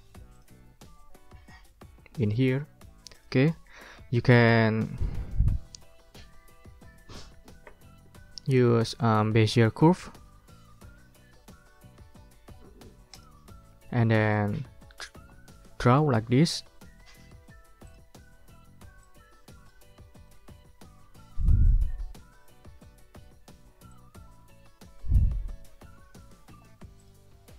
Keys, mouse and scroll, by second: 0.4 click, 3.1 click, 3.6 middle click, 4.2 ctrl+scroll up 2, 4.6-5.3 ctrl+scroll down 4, 5.3 ctrl+scroll up 2, 13.1 click, 13.5 ctrl+click, 14.1 ctrl+scroll up 2, 14.3 ctrl+click, 16.1 ctrl+scroll up 2, 17.9 click, 19.0 click, 20.3 middle click, 20.9 ctrl+scroll down 2, 23.9-25.9 drag, 27.0 click.